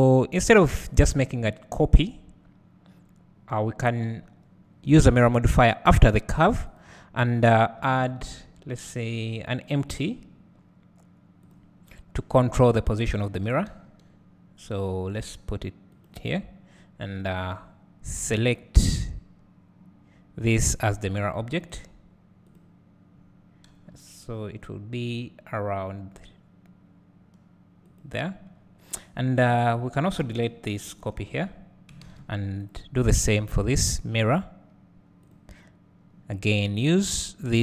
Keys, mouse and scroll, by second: 20.7 click, 23.7 g, 27.9-29.7 drag, 30.4 x, 30.9 click, 31.4 x, 32.7 click, 35.3-37.6 drag.